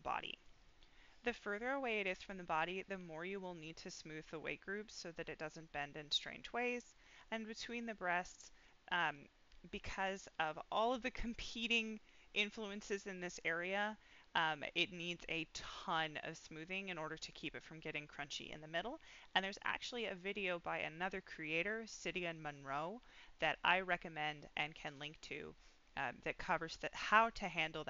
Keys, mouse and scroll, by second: 0.6-2.1 middle drag, 2.4-2.7 scroll up 1, 2.8 middle click, 6.9 middle click, 7.3-7.8 scroll up 2, 7.8-8.9 middle drag, 9.6-10.0 scroll down 2, 10.0 middle click, 10.7 scroll up 2, 12.7-13.1 scroll up 1.